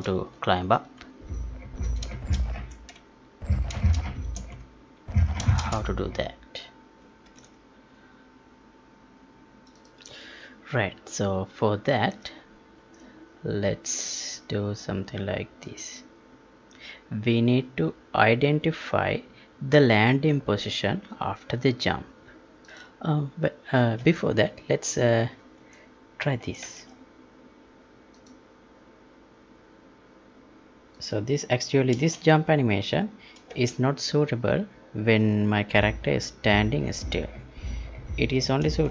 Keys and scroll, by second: 2.1 space, 3.7 space, 7.3 ctrl+p, 12.1 alt+Tab, 12.9 Tab, 25.6 alt+Tab, 31.9 space, 33.5 space, 38.8 space.